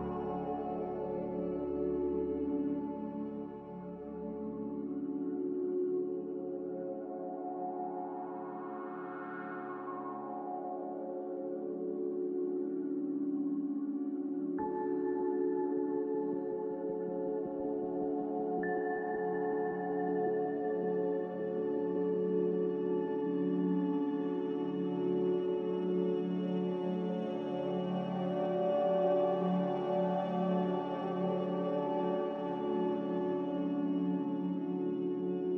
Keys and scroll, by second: 2.7-3.4 typing, 4.8 z, 6.8 ctrl+z, 11.3-15.0 typing, 18.1-19.4 typing, 21.6 f, 22.6 a, 24.1 f, 25.5-26.5 typing, 29.2 ctrl+k, 31.4 ctrl+k, 32.0-32.7 typing.